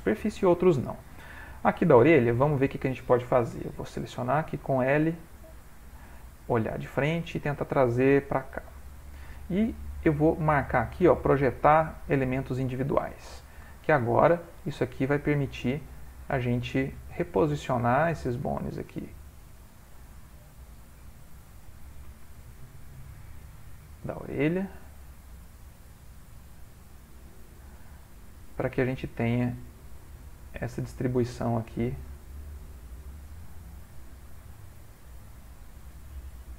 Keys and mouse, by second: 0.0 middle click, 4.2 l, 4.8 middle click, 6.7 click, 7.5 g, 10.0 click, 12.7 ctrl+middle click, 13.8 shift+middle click, 13.9 shift+middle click, 14.6 g, 16.1 click, 16.4 g, 17.4 click, 17.8 g, 18.9 click, 19.1 g, 21.0 click, 21.3 g, 23.0 click, 24.0 g, 25.9 click, 26.4 g, 28.1 click, 28.7 g, 29.9 click, 30.5 g, 31.5 click, 32.0 g, 34.4 click, 34.9 g, 36.1 click.